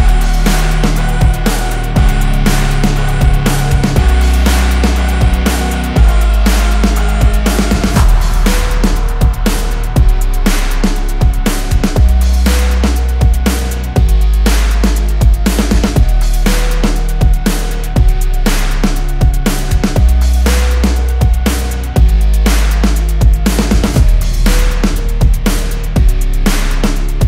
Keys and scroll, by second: 3.3 F3, 3.7 Escape, 18.9 space, 19.7 Escape, 25.1 F10.